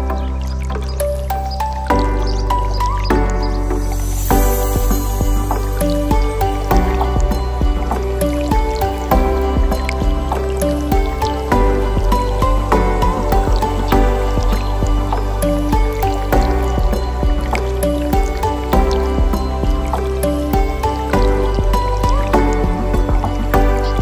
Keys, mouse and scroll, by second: 1.4 shift+d, 2.9 x, 4.1 click, 5.9 shift+d, 6.8 x, 8.5 click, 10.4 click, 11.5-13.4 drag, 14.0 click, 14.8-16.6 drag, 19.6-20.4 scroll down 4, 20.9 shift+click, 21.7-22.7 scroll down 1, 22.7-23.9 drag.